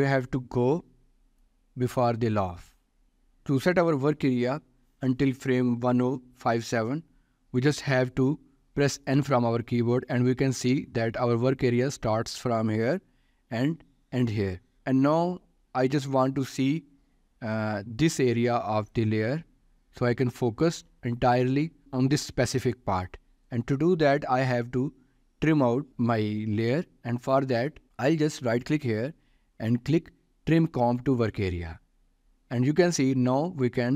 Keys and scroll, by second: 9.6 n.